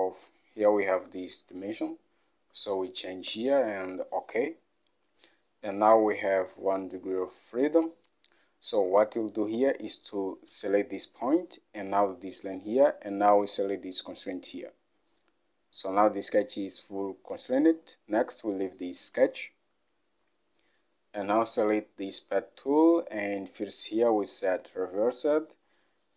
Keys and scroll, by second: 2.6-3.6 typing, 3.4 Return, 8.2 typing, 8.9 Escape.